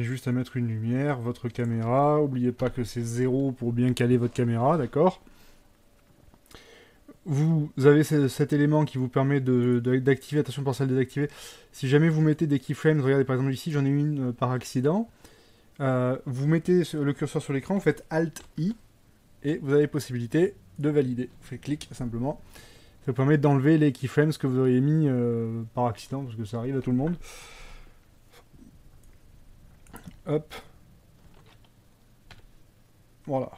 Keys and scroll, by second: 2.7 KP_0, 18.7 alt+i, 30.2 F12, 32.4 Escape.